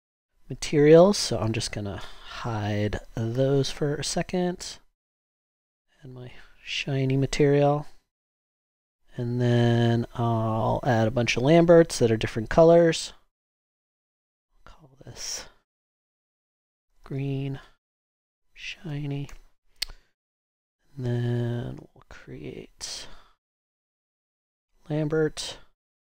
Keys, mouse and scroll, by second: 3.3 ctrl+h, 16.2-19.4 typing.